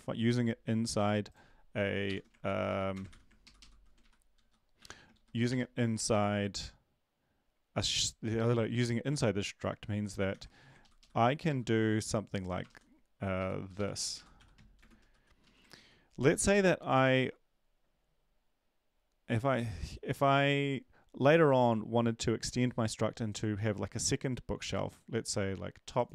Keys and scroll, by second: 2.0 shift+Home, 2.4 ctrl+c, 2.7 End, 2.9 Return, 3.1 ctrl+v, 3.4 ctrl+Left, 3.6 ctrl+Left, 4.0 Right, 4.4 End, 5.2 Home, 10.3 ctrl+v, 10.8 ctrl+Left, 11.0 ctrl+Left, 12.7 typing, 13.4 Left, 13.7 Up, 13.9 Left, 14.1 Left, 14.3-15.6 typing, 15.7 ctrl+s.